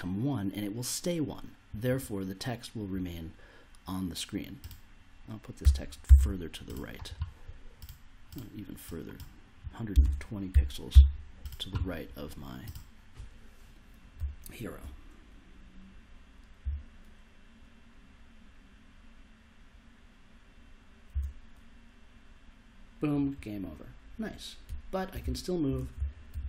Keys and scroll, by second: 5.6 1, 6.0 0, 9.9 BackSpace, 10.5 2, 10.9 0, 14.1 s, 16.6 s, 21.1 s, 24.6-26.4 typing.